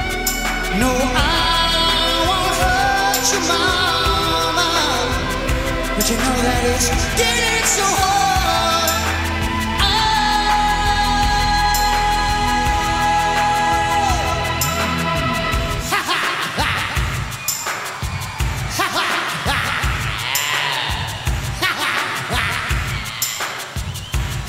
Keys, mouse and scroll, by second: 0.5-3.6 drag, 8.1 click, 12.0-16.3 drag, 17.6-19.0 drag, 21.4 r.